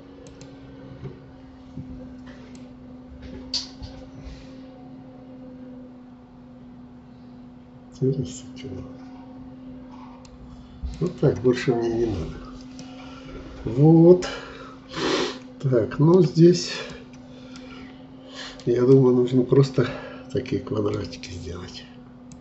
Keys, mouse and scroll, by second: 2.6-11.9 drag, 11.9-12.4 scroll down 1, 12.4 scroll down 1, 12.7-15.9 middle drag, 16.7 click, 17.5-20.9 middle drag, 20.9-22.3 scroll up 1, 22.3-22.4 drag.